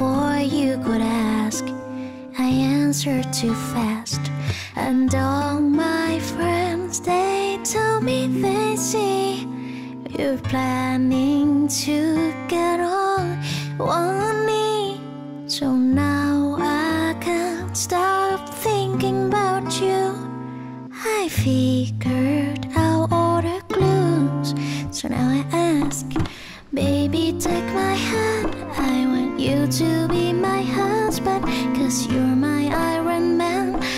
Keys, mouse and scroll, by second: 19.2 ctrl+z, 20.0 ctrl+z.